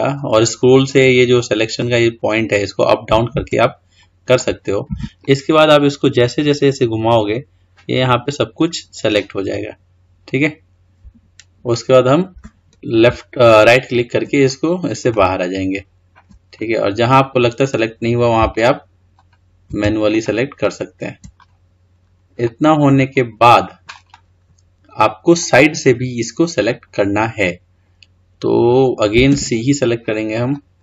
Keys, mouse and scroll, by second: 14.2-15.0 scroll down 4, 15.0-16.5 middle drag, 16.5-18.3 scroll up 4, 18.3 ctrl+click, 20.0 shift+click, 20.5 shift+click, 21.3-21.9 scroll down 2, 21.9-22.3 scroll up 2, 22.3-27.1 middle drag, 29.1 c.